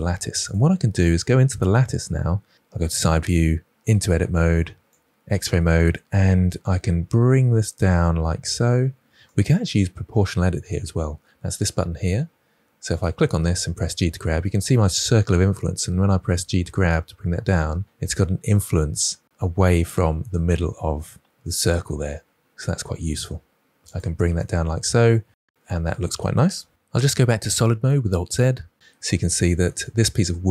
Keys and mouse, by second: 1.6 KP_1, 3.8 Tab, 4.8 alt+z, 7.2 g, 9.2 click, 12.9 click, 13.7 g, 23.8 click, 27.0 alt+z.